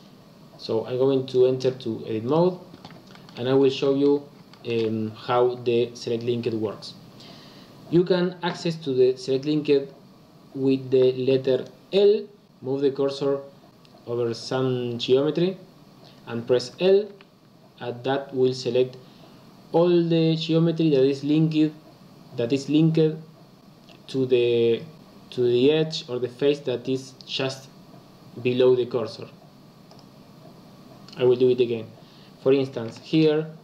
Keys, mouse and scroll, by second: 1.6-3.1 drag, 3.1 shift+middle click, 3.4-3.8 scroll up 1, 3.8 shift+middle click, 4.1-4.4 scroll down 1, 4.4-7.6 shift+middle drag, 17.0 l, 29.8 click, 32.8-33.6 shift+middle drag.